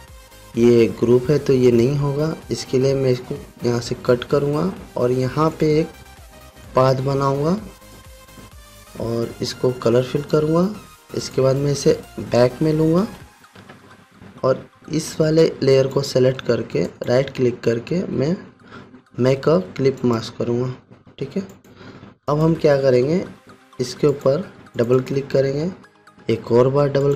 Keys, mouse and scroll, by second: 2.2 click, 4.7 ctrl+x, 6.1-8.8 drag, 13.5 ctrl+shift+[, 16.5 shift+click, 17.4 right click, 20.6 click.